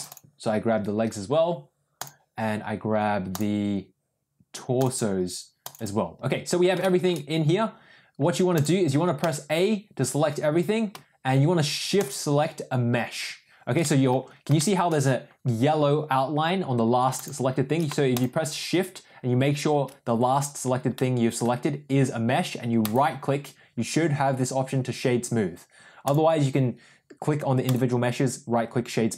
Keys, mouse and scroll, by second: 1.9 click, 6.7 shift+middle click, 8.5 click, 9.2 a, 11.9 click, 13.7 middle drag, 14.5 shift+middle drag, 17.1 shift+click, 20.9-21.3 middle drag, 22.7-25.3 right drag, 27.7-28.8 right drag.